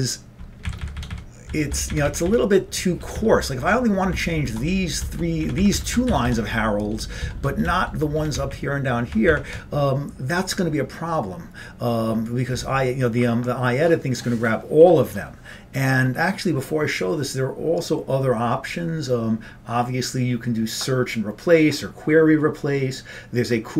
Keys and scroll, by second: 0.7 Up, 1.6 Down, 1.7 Down, 2.0 Up, 2.1 Up, 2.3 Up, 2.9 Down, 3.2 Down, 4.2 Down, 5.5 Up, 5.6 Up, 5.9 Up, 6.2 Down, 6.3 Down, 7.1 Down, 7.3 Down, 8.2 Up, 9.1-12.1 Up.